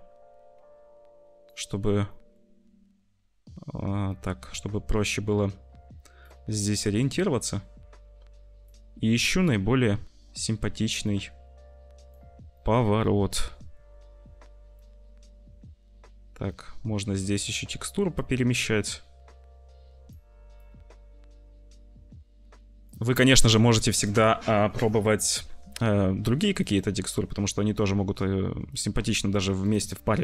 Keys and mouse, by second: 1.4 middle click, 2.0 click, 2.3-4.0 middle drag, 4.0-5.1 drag, 5.1-6.2 middle drag, 6.9-8.6 middle drag, 9.3-11.3 drag, 11.3 middle click, 12.4 middle click, 13.0 middle click, 14.7-16.7 drag, 16.7-18.1 middle drag, 18.5-20.0 middle drag, 20.6-22.2 middle drag, 22.2 click, 23.3 click, 23.8 click, 28.6 click.